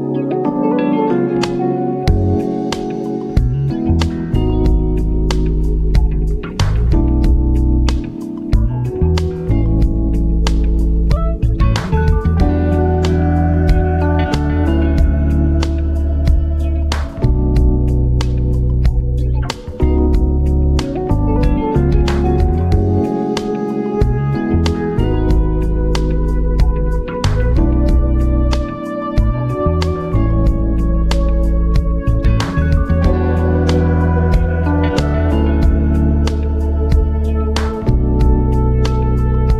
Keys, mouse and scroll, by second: 0.6-3.5 typing, 1.0 click, 3.7 ctrl+Right, 5.8 shift+Right, 5.8 shift+Down, 6.8 shift+Down, 6.9-9.7 drag, 10.1 BackSpace, 11.4 click, 12.5 click, 15.0 scroll down 1, 15.6 alt+click, 20.3-21.4 typing, 22.3 click, 23.5 click, 24.1 v, 24.3 Left, 25.1 v, 25.3 Left, 25.8 shift+Left, 27.3 Left, 27.6 Up, 27.8 Left, 28.5 Down, 29.3-30.6 drag, 30.6 v, 30.8 Up, 30.9 Left, 31.1 Down, 31.3 Left, 31.8 ctrl+j, 32.0 v, 32.1 shift+Right, 38.0 click, 38.9-39.5 typing.